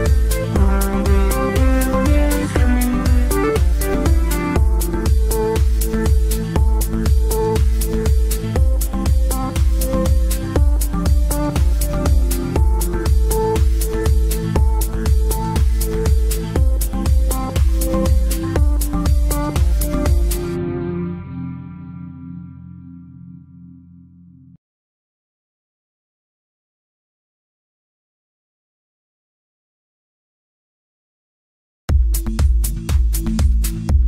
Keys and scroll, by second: 9.9 g, 31.9 g.